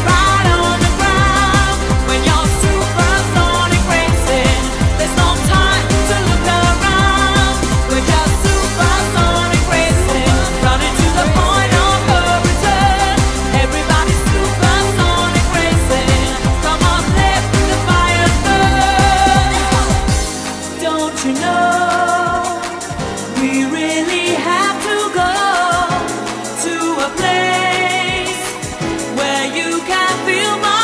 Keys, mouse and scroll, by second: 18.1 click, 21.5 click, 29.9 click.